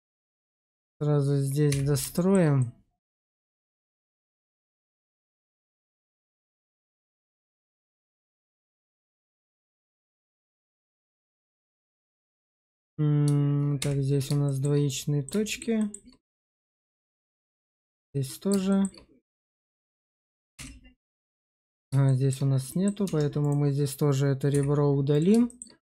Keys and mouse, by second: 1.6 f, 2.0 shift+middle click, 2.5 middle click, 5.9 click, 6.7 click, 7.7 shift+click, 8.9 shift+click, 11.2 shift+middle click, 12.0 middle click, 13.7 1, 14.3 shift+middle click, 14.8 middle click, 15.3 shift+middle click, 15.7 shift+middle click, 16.5 click, 17.3 1, 17.9 middle click, 18.6 shift+middle click, 19.2 click, 19.3 right click, 20.5 1, 21.1 right click, 21.9 shift+click, 22.6 middle click, 22.9 Tab, 24.4 x, 25.4 shift+middle click.